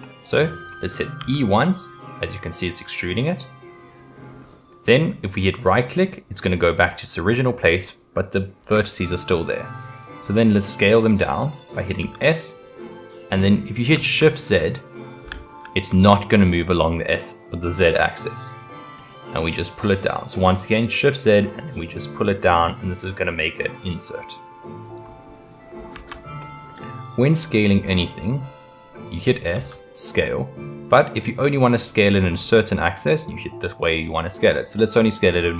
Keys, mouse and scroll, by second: 1.2 e, 6.9-9.3 middle drag, 12.0 s, 25.9 Tab, 26.4-29.1 middle drag, 29.1-29.5 scroll down 1, 29.5 s.